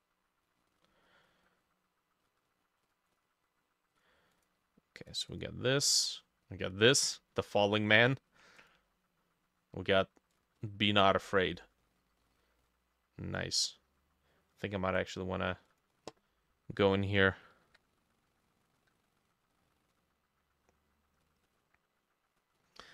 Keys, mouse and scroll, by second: 3.1-7.3 drag, 17.7-20.8 drag, 17.7 b, 21.5-22.9 drag.